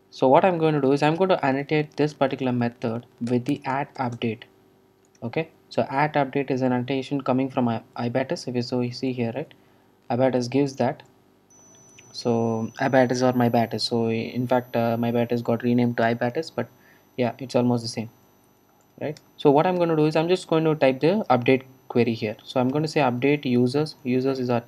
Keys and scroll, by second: 9.5 Return.